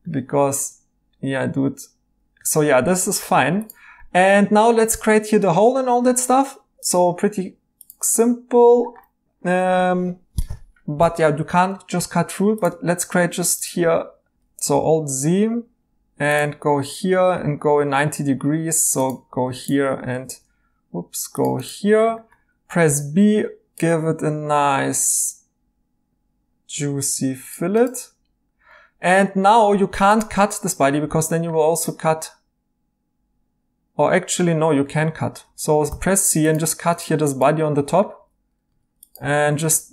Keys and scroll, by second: 4.7 e, 12.0 a, 14.3 Escape, 14.3 a, 14.7 alt+z, 20.2 ctrl+z, 22.8 b, 29.7 c, 34.5 Escape, 35.8 c, 37.6 Tab, 38.2 Tab, 38.6 Tab, 39.2 typing.